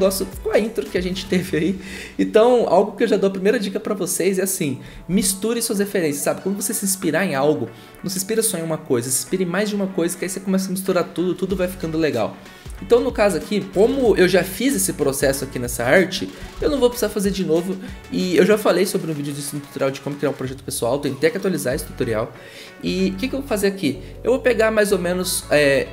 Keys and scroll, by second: 5.1 ctrl+z, 16.5 ctrl+z.